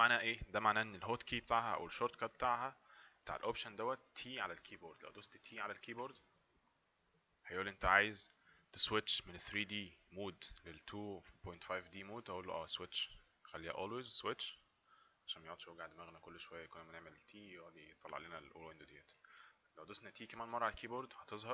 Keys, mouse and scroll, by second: 5.9 t, 14.4 click, 19.2 t, 21.3 typing.